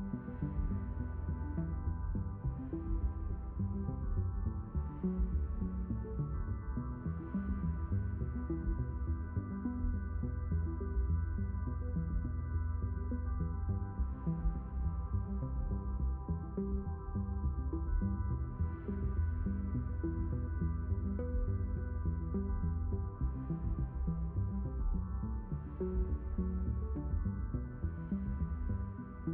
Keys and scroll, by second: 13.3 ctrl+z, 13.3 q, 14.0 ctrl+z, 14.7 s, 18.1 q, 19.6 s, 24.8 q.